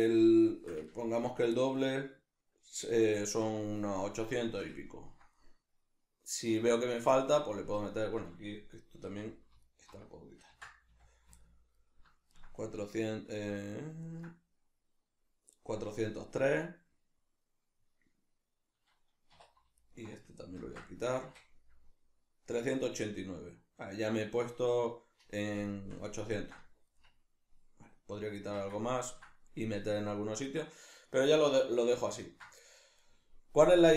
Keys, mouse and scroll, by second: 0.9-9.6 ctrl+middle drag, 9.1 2, 9.6 alt+right click, 10.5 ctrl+x, 11.4-19.8 ctrl+middle drag, 19.3 2, 19.8 alt+right click, 20.6 ctrl+x, 22.5-33.9 middle drag, 28.5 Tab.